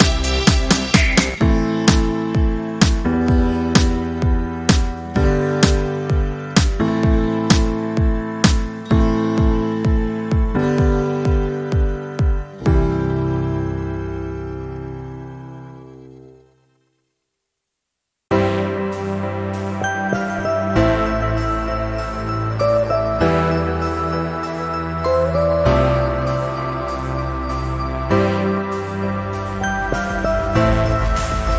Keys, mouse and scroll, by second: 0.8-2.4 drag, 6.8 ctrl+scroll down 1, 8.0-9.3 drag, 10.0 ctrl+scroll up 1, 11.1-12.0 click, 12.0 ctrl+scroll down 1, 12.8 ctrl+scroll up 1, 13.7-14.9 drag, 17.1 ctrl+scroll down 1, 18.1 v, 18.6 shift+click, 19.4 click, 20.2 ctrl+scroll up 1, 20.5 click, 22.9 click, 23.5 ctrl+scroll down 1, 24.9-25.8 drag, 26.4 Delete, 28.0-28.6 drag, 29.8 Delete, 30.8-31.4 drag.